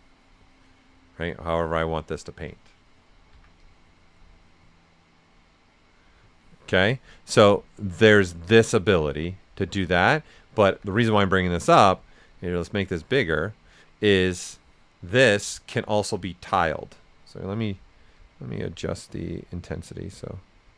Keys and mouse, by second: 3.3 l, 3.6-6.8 drag, 6.8-8.5 drag, 8.5 click, 10.6 z, 11.5-12.9 drag, 12.9 click, 14.0-16.8 drag, 18.1-20.7 drag.